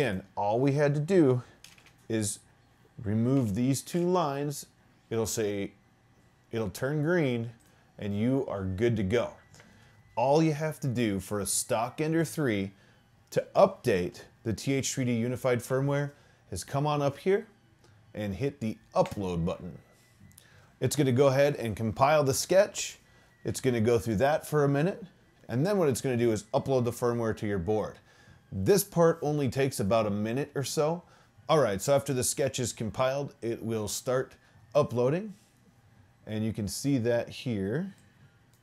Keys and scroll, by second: 1.7 /, 1.9 /, 3.4 BackSpace, 4.0 BackSpace.